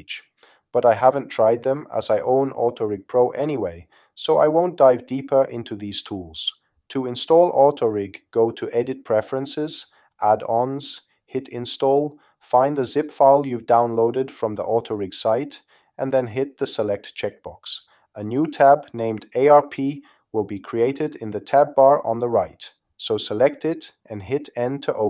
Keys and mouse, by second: 6.0-7.7 drag.